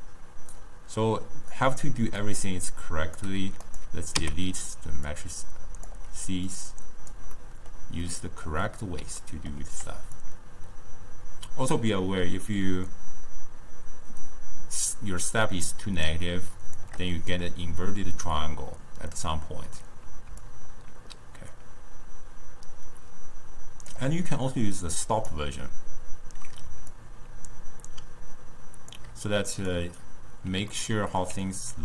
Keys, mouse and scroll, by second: 2.3 click, 3.8 click, 4.8 x, 5.2 drag, 6.6 click, 7.5-10.3 middle drag, 10.3-13.3 shift+drag, 20.6-23.6 shift+drag, 24.5-30.8 drag, 30.8-31.8 ctrl+middle drag.